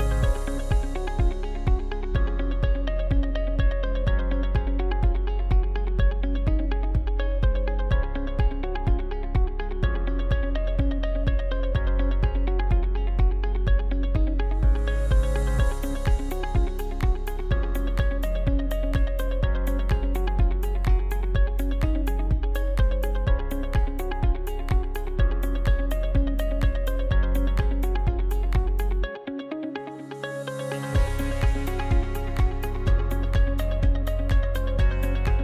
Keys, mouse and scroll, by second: 0.3 s, 12.0 right click, 13.5 s, 17.6-20.7 middle drag, 28.3 s, 30.9-31.4 scroll up 4, 31.4-33.4 middle drag, 33.4 right click, 33.8-35.0 scroll down 1, 35.0-35.4 middle drag.